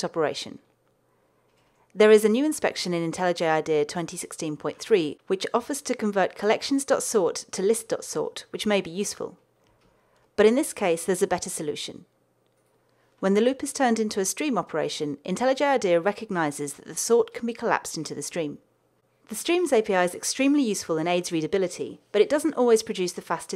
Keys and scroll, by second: 5.5 alt+Return, 9.4 super+z, 14.2 alt+Return.